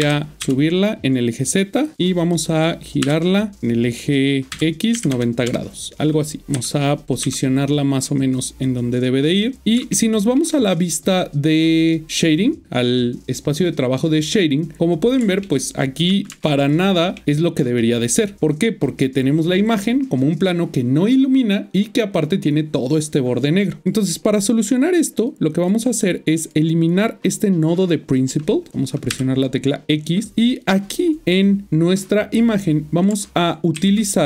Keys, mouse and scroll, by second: 0.3 typing, 1.9 click, 3.1 typing, 5.1 typing, 5.5 Return, 6.4 typing, 9.2 typing, 9.2 click, 9.6 ctrl+middle click, 12.2 click, 14.8 middle click, 23.8 click, 26.4 click, 29.1 click, 30.3 click.